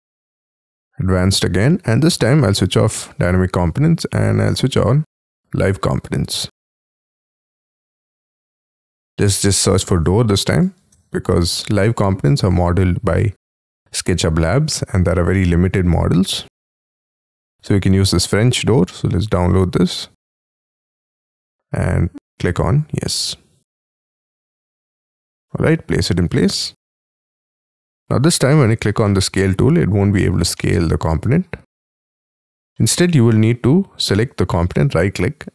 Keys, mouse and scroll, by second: 1.1 scroll down 4, 9.0 double click, 10.0 BackSpace, 10.9 Return, 10.9 Right, 15.2-19.8 scroll down 6, 25.0 middle click, 26.6 middle click, 27.7 middle click, 28.4 space, 28.6 s, 29.0 middle click, 30.0 space, 30.6 middle click, 31.9 F2, 32.6 middle click, 34.7 right click, 34.7 right click.